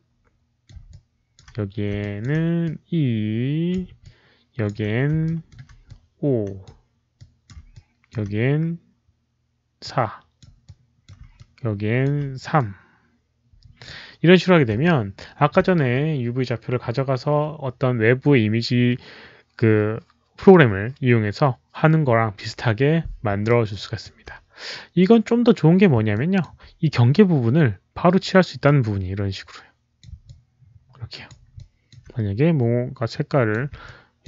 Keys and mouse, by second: 0.8 alt+click, 1.9 alt+click, 2.5-3.6 alt+drag, 3.6 ctrl+z, 3.9 alt+click, 5.2 alt+middle click, 5.8 alt+click, 7.1 alt+click, 7.6 alt+click, 9.7 alt+click, 10.3 alt+middle click, 10.5 alt+click, 11.3 alt+click, 12.5-13.8 alt+drag, 14.8 alt+click, 16.6 alt+click, 18.4 alt+click, 23.4 alt+click, 26.0 alt+click, 28.5-29.9 alt+drag, 30.2 alt+click, 31.5 alt+click, 33.0 alt+click, 33.7 alt+click.